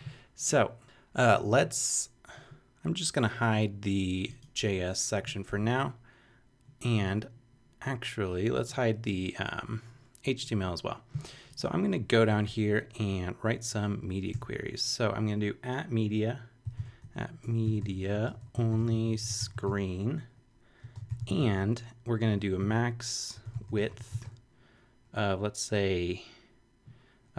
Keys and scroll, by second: 12.3 Return, 14.3 shift+2, 16.4-25.1 typing, 27.1-27.3 typing.